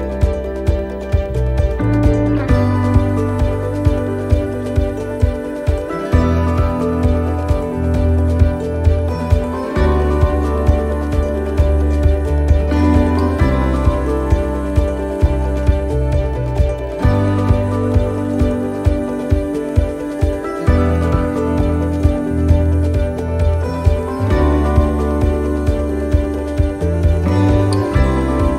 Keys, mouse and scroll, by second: 0.8 shift+middle click, 2.5 right click, 3.0 l, 3.1 l, 3.3 l, 3.5-5.0 l, 6.9 x, 9.1 click, 10.5 right click, 12.9 click, 13.7 click, 19.2 right click, 20.0 click, 26.4 right click, 27.3 click.